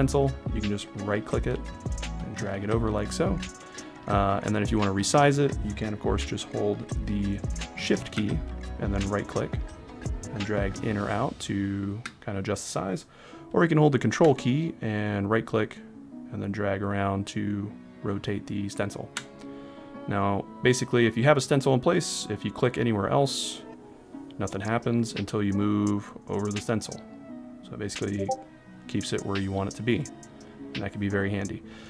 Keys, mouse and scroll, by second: 0.9 right click, 8.9 shift+right click, 15.3 ctrl+right click, 22.8 click.